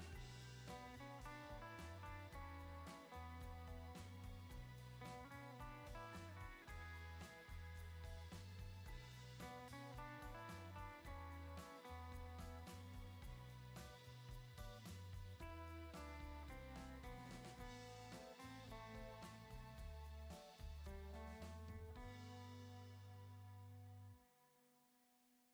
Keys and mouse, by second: 1.0 Return, 1.0 ctrl+z, 1.7 Return, 3.6 Return, 7.5 click, 9.5 ctrl+z, 9.9 Return, 10.5 ctrl+z, 11.9 Return, 13.7 Return, 15.2 click, 16.3 Return, 17.4 click, 19.4 Return, 19.8 click, 21.1 Return, 21.2 click, 22.1 ctrl+Return, 22.6 ctrl+z, 23.4 Return, 24.1 ctrl+z, 25.4 middle click.